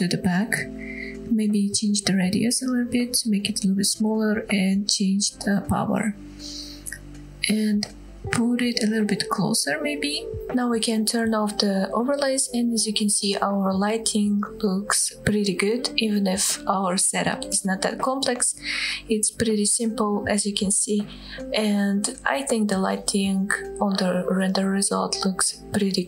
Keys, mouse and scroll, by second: 0.2 click, 1.6-3.0 drag, 3.7-4.9 drag, 4.5 KP_0, 7.6 g, 10.4 click, 10.4-10.8 scroll down 3, 11.6-12.1 drag, 12.8-13.1 scroll up 2, 16.1 scroll down 1, 16.6-17.4 scroll down 2, 17.4 scroll up 2, 20.0-20.4 scroll down 2, 20.5-21.5 middle drag, 21.5 scroll up 2, 21.9 shift+middle click, 22.3-22.8 middle drag, 23.0-23.3 scroll down 1, 23.3 click, 23.8-24.1 scroll down 1, 24.1-26.0 middle drag.